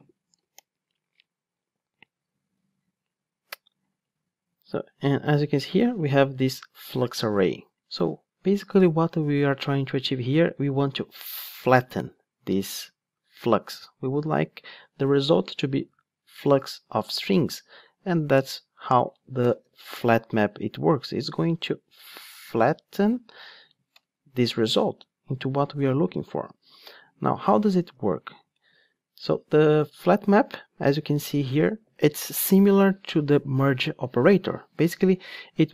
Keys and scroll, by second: 20.0 Return, 22.6 super+x.